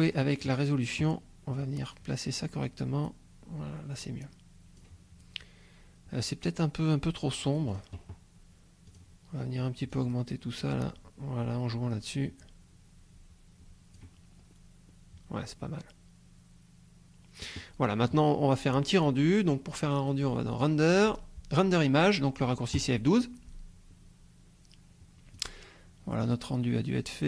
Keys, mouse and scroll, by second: 7.7 click, 8.9 click, 10.0-14.2 drag, 14.4-14.7 scroll up 1, 14.9 scroll up 2, 20.5 click, 22.8 click, 25.6-27.2 drag.